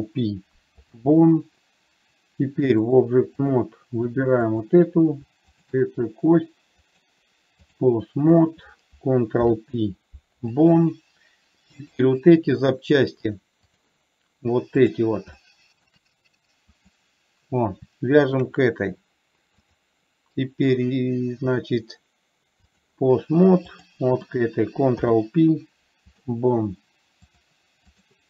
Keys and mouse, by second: 0.0 ctrl+p, 3.2-4.0 drag, 5.8 shift+click, 7.2-8.2 drag, 8.7 click, 9.8 ctrl+p, 12.2 click, 13.6 click, 15.7-16.2 shift+middle drag, 17.2 click, 18.6 shift+click, 20.1-23.2 drag, 24.1 click, 25.2 ctrl+p, 27.7-28.2 drag.